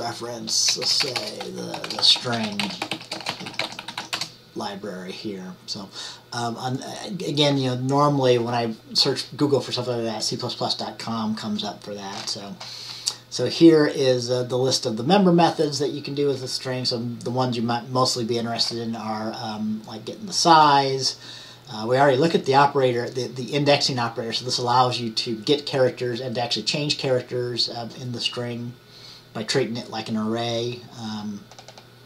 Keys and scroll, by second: 0.0-5.6 typing.